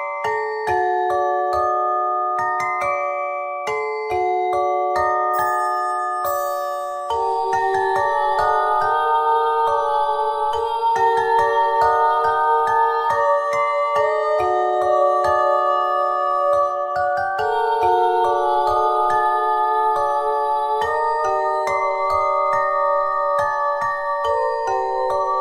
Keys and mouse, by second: 0.1 ctrl+r, 1.2 z, 2.8 z, 4.3 z, 5.7 ctrl+b, 10.5 z, 13.2-14.3 drag, 14.7 s, 17.0 click, 17.5 click, 19.0-20.6 drag, 20.7 s, 23.9 Tab, 25.0 KP_1.